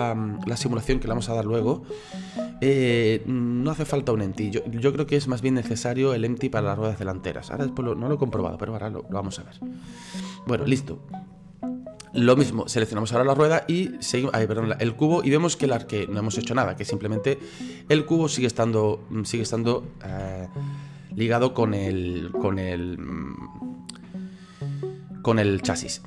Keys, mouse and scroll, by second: 12.4 right click, 13.4-20.1 drag, 20.1 ctrl+z, 22.8-26.0 middle drag.